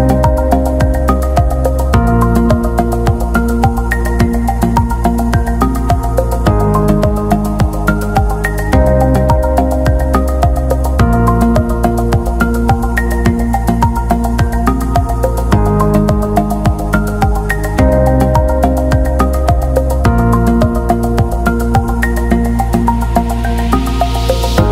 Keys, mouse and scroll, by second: 1.2 click, 3.5 click, 4.4-5.3 scroll up 1, 5.8 right click, 6.7 click, 8.1 ctrl+v, 9.3 click, 16.2 BackSpace, 16.5 Delete, 17.3 click, 18.5 Delete, 19.2 click, 19.7 g, 22.7 F3.